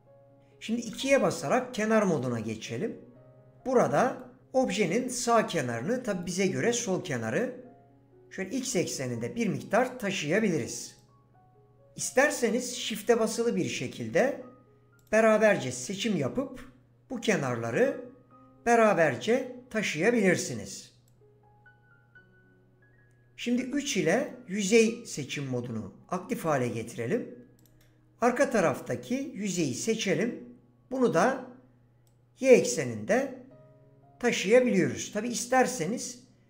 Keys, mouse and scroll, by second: 0.9 2, 2.2 click, 7.4 click, 11.0 click, 12.9 click, 15.0 shift+click, 17.8 click, 23.7 3, 27.6 click, 30.2 click, 35.6 click.